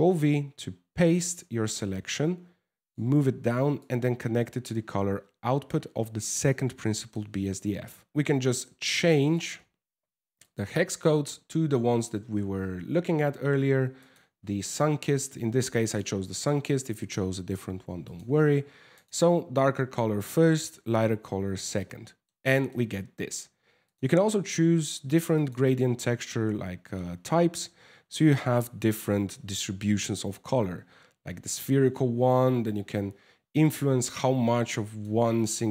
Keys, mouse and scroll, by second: 1.0 click, 3.4 click, 5.3 click, 6.5 middle click, 8.1 click, 8.1 m, 10.9 scroll up 1, 15.4 click, 15.9 click, 21.4 middle click, 22.1 shift+middle click, 22.4 scroll up 3, 23.5 click, 25.0 click, 25.3 click, 31.5 click, 35.4 click.